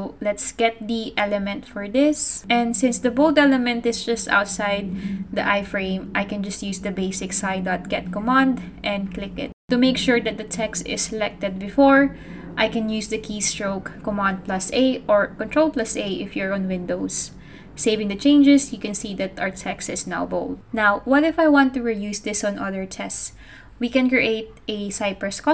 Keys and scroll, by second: 6.2 super+v, 6.8-10.5 typing, 12.7-15.7 typing, 17.3 super+s.